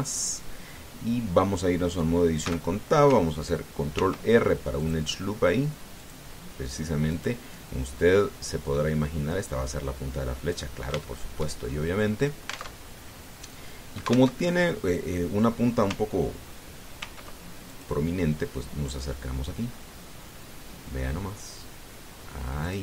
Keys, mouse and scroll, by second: 3.2 Tab, 4.8 ctrl+r, 5.6 click, 6.8 click, 7.9 right click, 8.8-11.5 drag, 11.8 shift+middle click, 12.4 shift+scroll up 3, 13.0 scroll down 2, 13.5 alt+Tab, 15.1 alt+Tab, 17.8 ctrl+r, 18.4 ctrl+click.